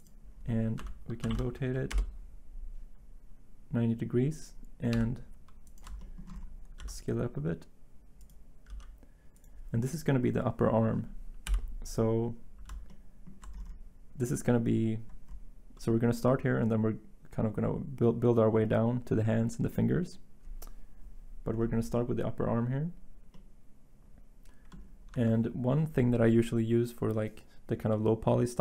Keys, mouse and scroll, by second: 0.8 r, 1.2 9, 1.3 0, 1.9 Return, 4.9 g, 6.8 s, 8.7 g, 11.5 7, 25.1 Tab.